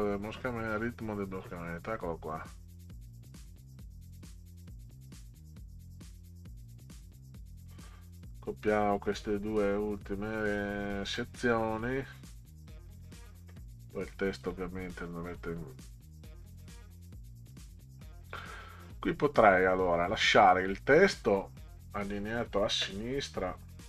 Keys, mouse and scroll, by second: 3.5-10.3 drag, 11.1 right click, 11.7 click, 12.9 click, 14.2 click, 14.4 click, 15.8-17.5 drag, 18.8 click, 20.1-21.1 drag.